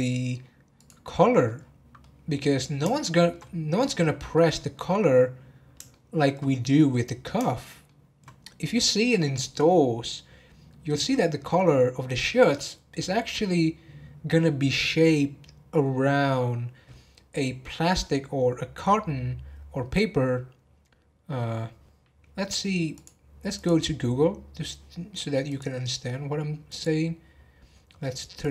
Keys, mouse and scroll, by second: 0.7 click, 1.3 scroll down 5, 1.9 scroll down 5, 2.0-4.6 middle drag, 4.6 scroll up 1, 5.9-6.4 shift+middle drag, 6.4 scroll up 1, 6.9-8.4 middle drag, 8.4 scroll up 1.